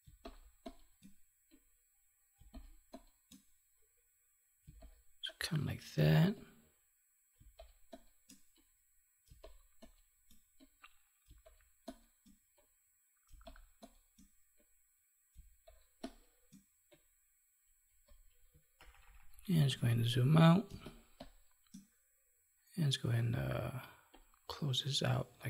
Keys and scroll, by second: 4.6 space, 7.3 space, 15.3 space, 18.7 ctrl+-.